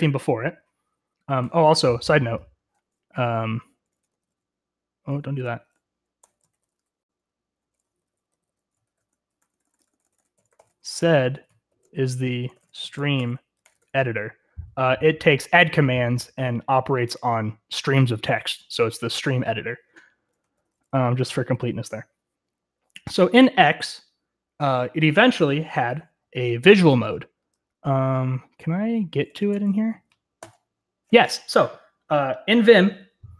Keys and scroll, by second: 3.0 Escape, 3.2-14.2 typing, 20.3-22.1 typing, 29.0-30.4 typing.